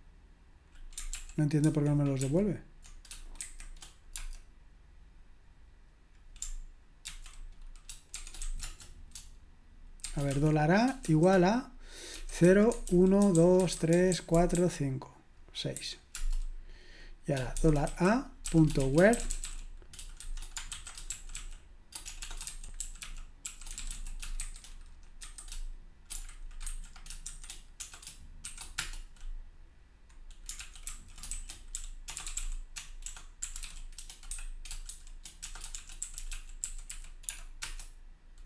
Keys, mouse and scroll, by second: 1.1 ctrl+p, 1.6 ctrl+w, 2.2 ctrl+w, 3.4 shift+., 4.1 space, 7.1 ctrl+c, 8.2 typing, 8.6 Return, 10.0-11.1 typing, 12.2-14.5 typing, 17.6-25.2 typing, 26.6-28.4 typing, 28.8 Return, 30.6 ctrl+p, 30.9 ctrl+a, 31.1-37.4 typing, 37.6 Return.